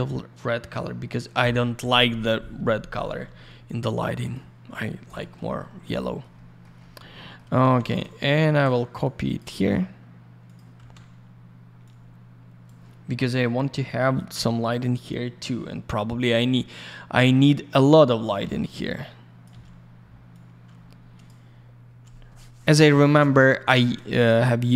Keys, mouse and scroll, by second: 4.2 click, 4.3 click, 5.9 alt+middle click, 6.3 middle click, 7.2-8.2 typing, 9.0 shift+click, 10.4 click, 10.5 click, 11.0 typing, 11.8 click, 17.7 alt+middle click, 19.0 click, 20.3 click.